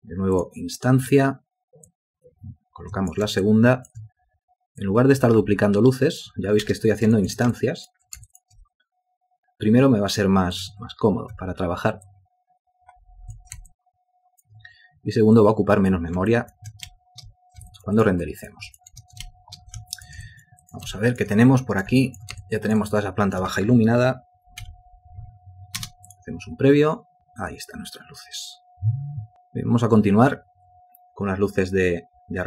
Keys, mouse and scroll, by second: 1.2 w, 3.6 ctrl+alt+click, 6.9 space, 7.4 ctrl+alt+click, 7.7 shift+click, 8.5 ctrl+click, 11.5 w, 13.9 ctrl+alt+click, 16.5 ctrl+alt+click, 17.1 ctrl+space, 17.9 ctrl+alt+click, 18.2 ctrl+alt+click, 18.3 ctrl+alt+double click, 18.9 alt+click, 19.5 ctrl+space, 20.2 alt+shift+click, 20.5 ctrl+alt+click, 20.9 ctrl+alt+click, 21.0 ctrl+alt+double click, 21.2 alt+shift+click, 21.6 alt+click, 22.2 ctrl+alt+click, 22.6 alt+shift+click, 23.2 alt+click, 24.8 F8, 26.0 space.